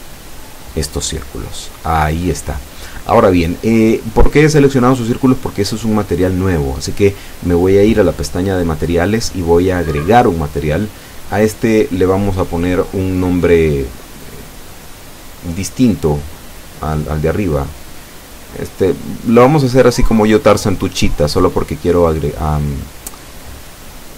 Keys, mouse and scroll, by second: 0.0 ctrl+middle click, 2.0 right click, 2.4 right click, 3.0 right click, 3.9 alt+shift+right click, 4.4 alt+shift+right click, 5.0 alt+shift+right click, 5.8 alt+shift+middle click, 6.6 middle click, 8.3 alt+shift+right click, 9.0 alt+shift+right click, 9.8 alt+shift+scroll down 2, 10.0-11.1 drag, 11.5-11.8 scroll up 2, 12.2 scroll down 2, 12.7-13.7 middle drag, 17.9 click, 22.0 click, 23.5 click.